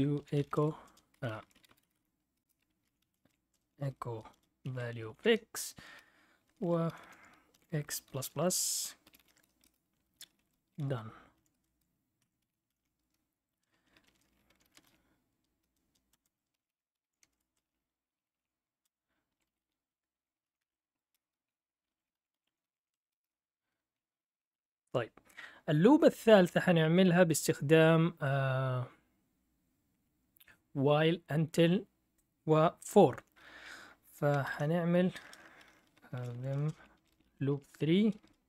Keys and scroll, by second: 0.0-9.0 typing, 2.4 Return, 9.6 Return, 10.1-20.5 typing, 12.2 Escape, 20.6 Tab, 21.1 Return, 21.6-25.1 typing, 27.4-28.1 typing, 34.4 ctrl+l, 35.9-38.4 typing.